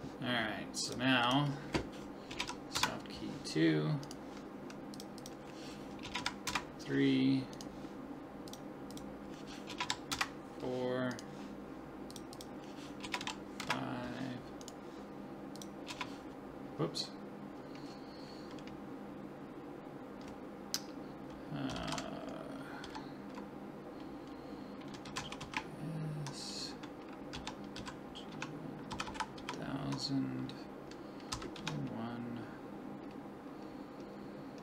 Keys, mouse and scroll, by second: 0.9-2.5 drag, 4.0 right click, 4.9-6.6 drag, 7.5-9.1 right drag, 8.5 click, 11.1 right click, 13.0 click, 14.6 right click, 16.5 click, 29.1 0.